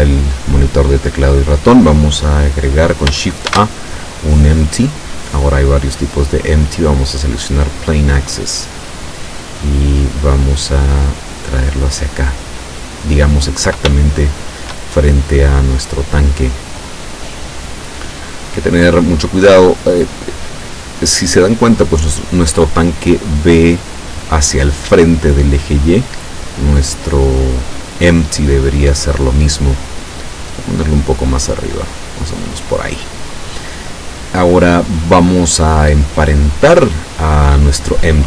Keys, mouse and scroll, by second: 3.6 shift+a, 8.8 click, 10.5-12.8 drag, 14.0 shift+middle click, 15.5-18.0 drag, 19.6 right click, 26.1 right click, 28.6-29.8 middle drag, 30.6-32.7 drag.